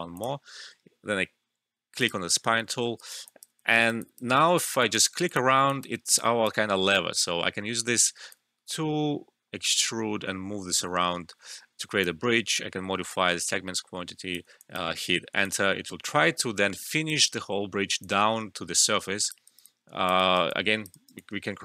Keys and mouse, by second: 0.1 click, 2.7 alt+middle click, 3.0 alt+right click, 3.2 alt+click, 3.5 typing, 3.6 alt+middle click, 3.8 alt+right click, 4.0 alt+click, 4.4 alt+middle click, 4.6 alt+click, 5.6-5.9 typing, 6.1 alt+click, 6.6 alt+middle click, 6.9-14.5 alt+drag, 14.8 Return, 15.4-18.0 alt+drag, 18.0-19.4 alt+drag, 19.4 alt+right click, 19.6 alt+click, 20.1 alt+right click, 20.5 alt+click, 20.9 alt+right click, 21.1-21.6 alt+drag.